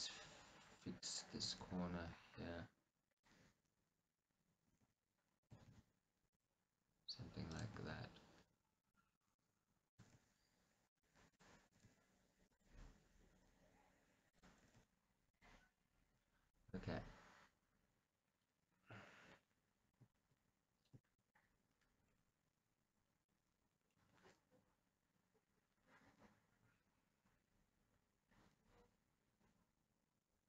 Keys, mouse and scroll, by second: 0.0-1.5 drag, 1.5 g, 3.3 click, 4.8 g, 6.4 click, 7.8 g, 8.9 click, 10.0 click, 10.1 g, 11.0 right click, 11.3 click, 11.8 g, 12.6 click, 14.4 click, 14.7 g, 15.5 click, 16.2-16.7 scroll down 1, 16.7-28.1 middle drag, 20.7 scroll.